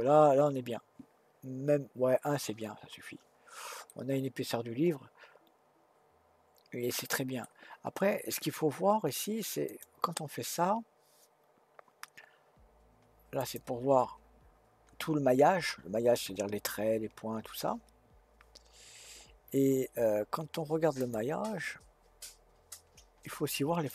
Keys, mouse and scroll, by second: 2.9-3.4 scroll up 1, 3.4-3.9 scroll down 1, 3.9-7.0 middle drag, 9.7-12.8 drag, 21.0-23.9 drag.